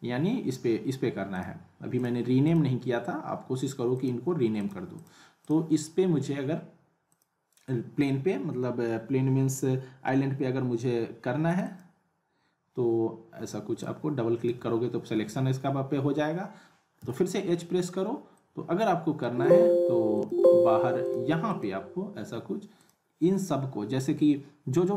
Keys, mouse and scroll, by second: 1.3 click, 11.5 click, 13.8-14.7 drag, 15.1 ctrl+z, 17.0 h, 18.6-19.0 click, 19.2-20.1 scroll down 1, 20.1 click.